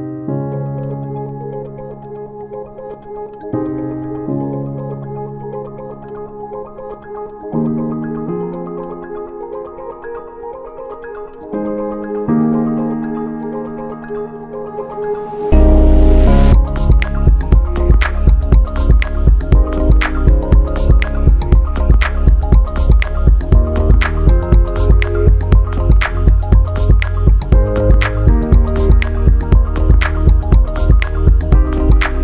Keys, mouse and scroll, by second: 2.4 middle click, 3.1-6.9 drag, 7.3-7.9 shift+right drag, 8.5 click, 9.4 click, 11.2-12.8 drag, 13.0-13.7 scroll up 4, 13.8 alt+middle click, 14.1 scroll down 1, 14.5 shift+right click, 15.4 scroll up 1, 16.0 scroll down 1, 16.7 click, 17.5-19.1 drag, 19.5 scroll up 2, 19.7 scroll down 2, 20.1-20.5 scroll up 5, 20.6 shift+right click, 22.5-22.9 scroll down 2, 23.5 scroll down 1, 24.4 right click, 26.0 click, 27.2 click, 28.4-28.8 scroll down 3, 29.5 scroll down 1, 30.4 click, 31.2-31.9 scroll down 4, 32.1 alt+middle click.